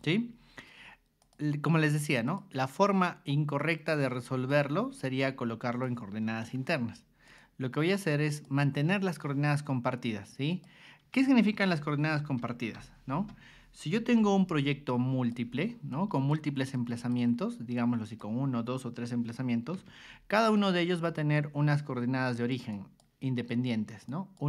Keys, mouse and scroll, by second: 1.2 click, 2.2 click, 3.6 click, 4.1 ctrl+1, 4.5 click, 5.2 ctrl+click, 6.4 Escape, 7.2 click, 8.3 click, 10.5 click, 12.4 k, 12.7 y, 14.2 g, 14.9 ctrl+click, 15.9 ctrl+click, 16.7 ctrl+click, 17.7 ctrl+click, 19.8 b, 20.5 click, 21.0 click, 22.3 click, 22.7 click, 23.6 click, 24.1 click.